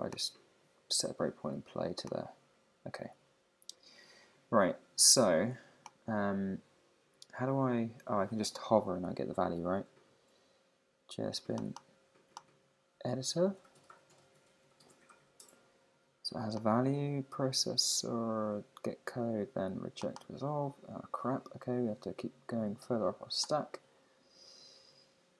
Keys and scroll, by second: 6.0 Escape.